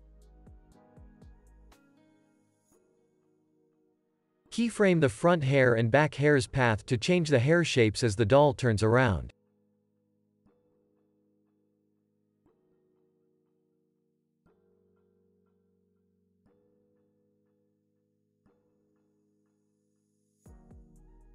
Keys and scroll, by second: 10.2 u, 15.1 x, 18.4 u, 20.4 z.